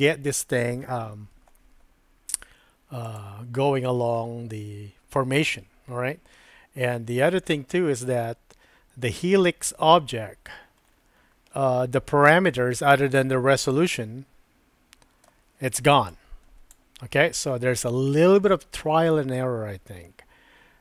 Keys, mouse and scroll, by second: 13.9-16.8 drag.